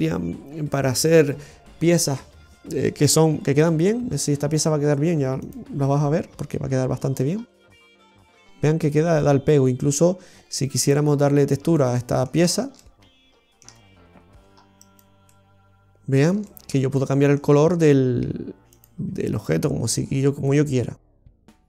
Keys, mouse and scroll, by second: 3.6 Tab, 3.6 \, 5.6 click, 6.3-7.1 scroll up 3, 7.1-7.6 scroll down 4, 7.6 middle click, 10.8 click, 11.7 middle click, 13.0 shift+middle click, 15.2 middle click, 16.4 shift+middle click, 16.9 middle click, 17.3 scroll up 1, 18.6 click.